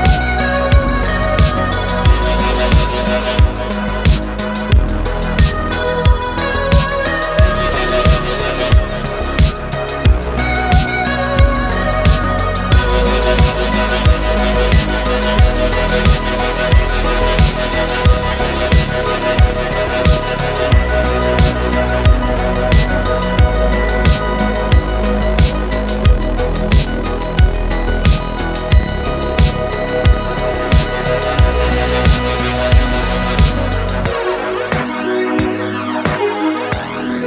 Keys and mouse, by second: 0.0 middle click, 1.0 middle click, 1.3 ctrl+z, 2.0-2.6 middle drag, 3.0-4.4 middle drag, 6.0 ctrl+s, 6.7 middle click, 7.5 middle drag, 9.3 click, 10.3 click, 10.8-11.8 middle drag, 12.0 g, 13.9 click, 14.1-15.1 middle drag, 15.2 middle click, 15.7 middle click, 16.4 g, 21.2 Escape, 21.4-22.0 middle drag, 22.2 g, 24.4 Escape, 24.8 ctrl+z, 25.2 middle drag, 25.8 click, 26.3-26.9 middle drag, 27.1 middle click, 27.6 g, 29.7 click, 29.9-30.5 middle drag, 30.9 g.